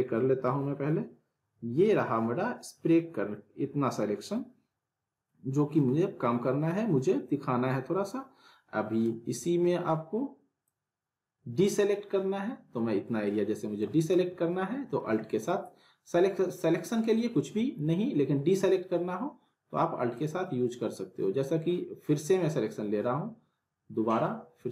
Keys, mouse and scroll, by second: 10.7-14.1 drag, 15.0 ctrl+z, 20.1-24.7 drag.